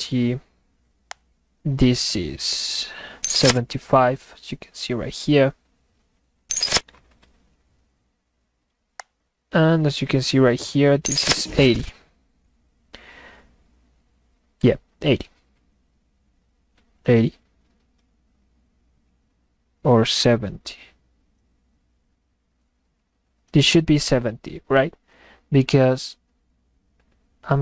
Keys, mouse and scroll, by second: 1.1 click, 9.0 click.